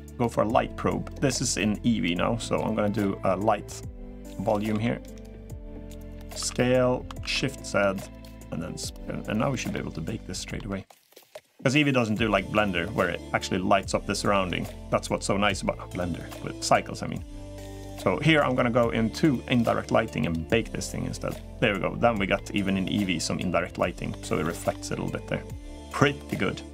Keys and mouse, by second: 3.4 click, 4.4 s, 6.2 s, 8.8-9.5 drag, 9.5-10.3 middle drag, 11.1-12.1 drag, 12.3-14.1 middle drag, 22.1-23.8 middle drag, 24.2-24.5 middle drag.